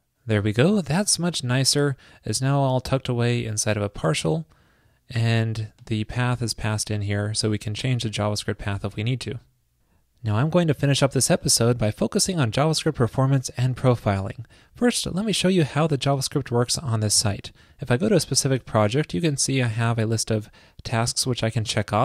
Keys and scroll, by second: 9.5 super+s.